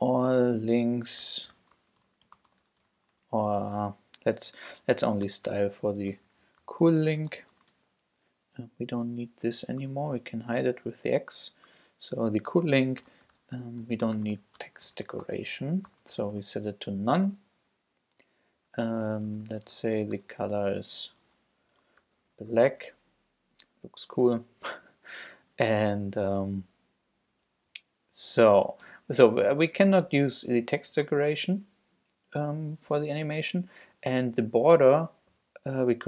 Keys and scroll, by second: 0.0-3.4 typing, 0.4 shift+Return, 4.3 shift+super+Left, 4.7 shift+super+Up, 5.2-8.0 typing, 8.7 Return, 12.8-16.8 typing, 18.6 Up, 18.8 Return, 19.0-23.0 typing, 24.8 Down, 27.6 super+Right, 28.1 super+Down, 28.4 Return, 28.8 ., 30.0 Up, 30.5 super+Up, 30.6 super+Right, 30.9 shift+super+Left.